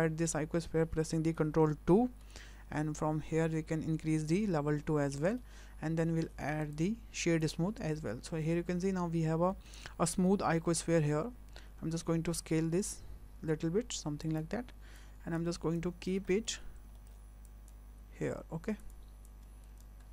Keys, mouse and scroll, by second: 2.0 ctrl+2, 5.0 scroll up 4, 5.4 shift+middle click, 6.6 right click, 8.6 scroll down 4, 9.2 scroll down 3, 9.5 middle click, 9.8 scroll up 5, 10.3 shift+middle click, 10.9 scroll down 5, 11.6 s, 15.0 click, 15.7 click, 16.3 shift+middle click, 16.6 scroll up 3, 16.9 shift+middle click, 17.4 click, 17.9 s, 19.3 click, 20.0 scroll down 2.